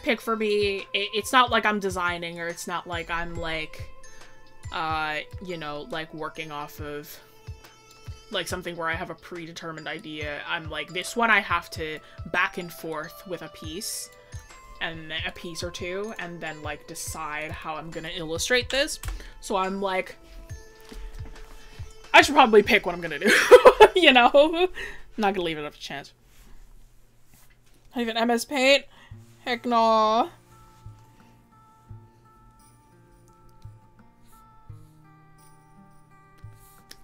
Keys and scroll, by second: 11.4 scroll.